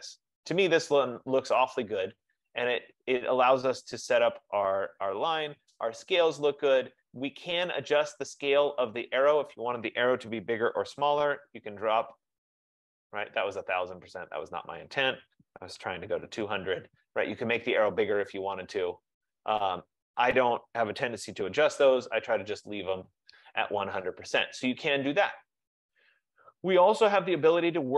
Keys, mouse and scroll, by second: 9.7 click, 10.2-11.1 typing, 13.2 click, 14.9 click, 15.1-16.0 typing, 18.4 click, 20.2 click, 21.2-22.2 typing, 22.5 Tab.